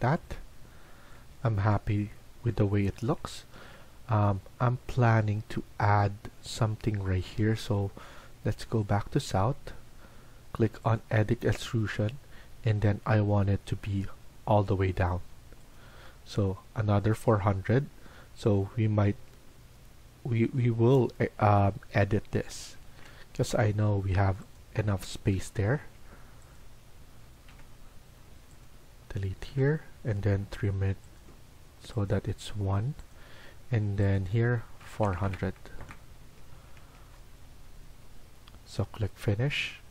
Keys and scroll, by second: 18.7 Escape, 19.0 Escape, 22.5 Escape, 23.1-24.0 typing, 25.7 Escape, 26.3-28.4 typing, 27.4 Delete, 29.4 Delete, 30.3-33.0 typing, 32.1 Escape, 34.3-35.2 typing, 35.7 Return, 36.1 Escape, 36.5 Escape, 37.1 Escape.